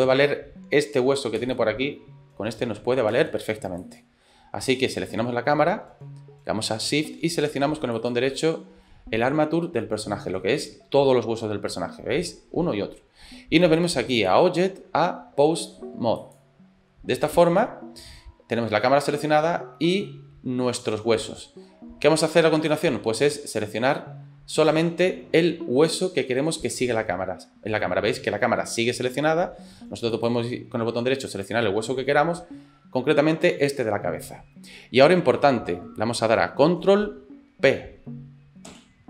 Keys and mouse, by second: 1.4 space, 3.2 space, 3.9 click, 8.1 shift+click, 14.1-16.6 drag, 23.5 click, 24.9-36.6 drag, 38.7 ctrl+p.